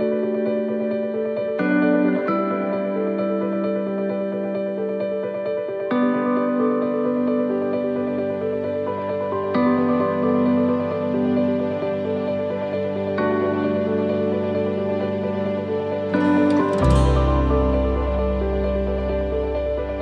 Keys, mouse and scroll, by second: 2.4 middle click, 5.7-6.1 scroll down 1, 18.4-18.7 scroll down 1, 19.3 scroll up 1.